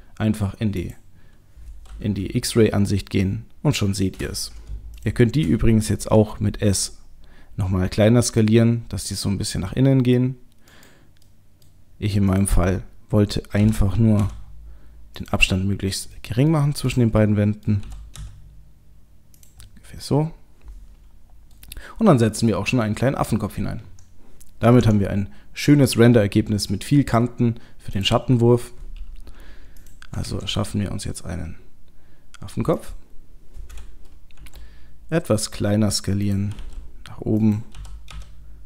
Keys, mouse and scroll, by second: 0.8 click, 2.2 middle click, 5.0 shift+click, 6.2 s, 11.3 middle click, 12.3 middle click, 12.3 click, 13.6 g, 15.8 middle click, 16.2 middle click, 16.9 click, 17.2 middle click, 17.8 g, 19.6 middle click, 21.5 middle click, 24.8 Tab, 27.9 click, 29.8 click, 30.3 shift+a, 34.4 s, 36.5 g, 37.5 click, 37.8 g.